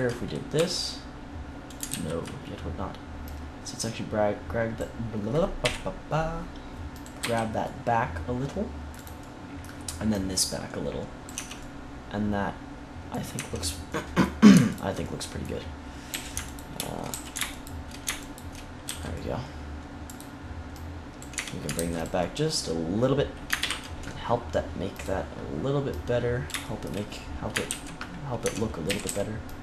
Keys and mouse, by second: 0.5 e, 1.8 ctrl+z, 5.5 KP_1, 6.9-8.6 drag, 7.1 c, 9.0-11.2 drag, 10.0 right click, 10.5 middle click, 10.5 right click, 11.3 Tab, 11.5-12.7 middle drag, 13.8 Tab, 14.6-21.1 drag, 16.0 a, 17.0 a, 18.8 c, 21.3 Tab, 21.7 ctrl+s, 23.5 ctrl+KP_1, 27.6 ctrl+z, 28.4 Tab, 28.8 a, 29.0 a.